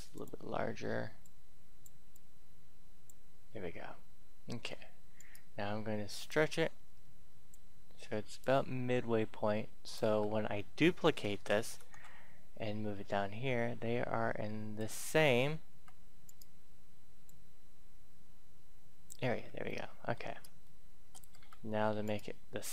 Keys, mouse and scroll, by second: 0.0 click, 2.1-3.6 drag, 4.1 Tab, 5.1 right click, 6.3-10.0 drag, 10.0 Tab, 10.9-12.3 typing, 14.6 click, 16.2 right click, 17.2-19.3 drag, 19.3 Tab, 19.6 middle click, 20.6 shift+middle click, 22.0 right click, 22.6-22.7 scroll down 1.